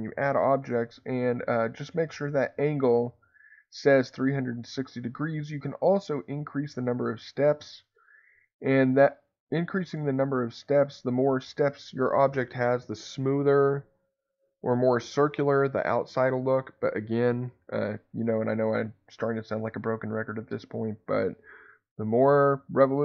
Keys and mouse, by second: 6.9 click, 7.1 click, 7.3 click, 7.6 click, 7.8 click, 8.0 click, 8.2 click, 8.4 click, 8.6 click, 9.1 click, 9.3 click, 9.5 click, 9.8 click, 10.0 click, 10.2 click, 18.6 middle click.